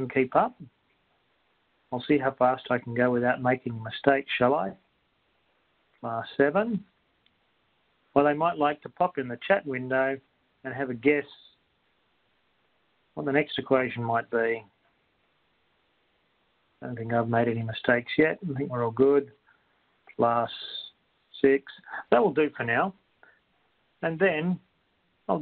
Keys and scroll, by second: 0.8 7, 2.0 4, 3.4 Right, 5.0 Right, 6.4 7, 7.4 Return, 11.0 Return, 13.4 6, 14.4 ^, 16.8 5, 18.4 Right, 19.4 x, 21.4 6.